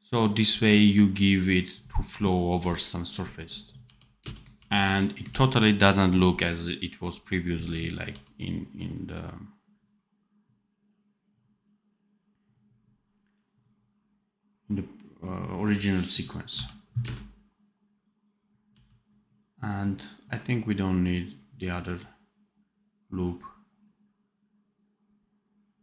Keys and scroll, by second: 3.7 d, 4.1 space, 4.4 ctrl+b, 8.0 d, 16.4 d, 16.9 space, 18.6 d.